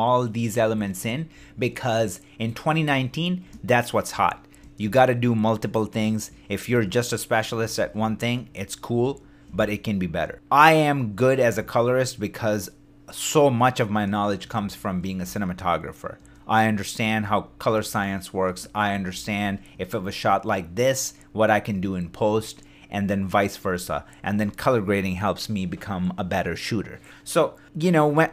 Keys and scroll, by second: 0.7 shift+d, 4.2-6.4 typing, 9.5 shift+space, 11.3 shift+d, 14.5 shift+d, 15.2 shift+space, 17.0 shift+space, 17.2 shift+d, 17.8 shift+space, 19.1 shift+d, 21.9 shift+d.